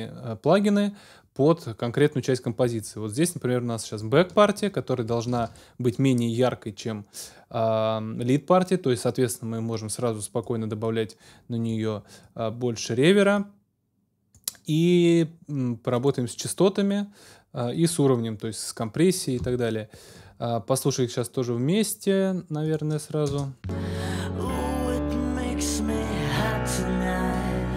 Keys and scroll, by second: 5.4 ctrl+alt+super+s, 23.2 space.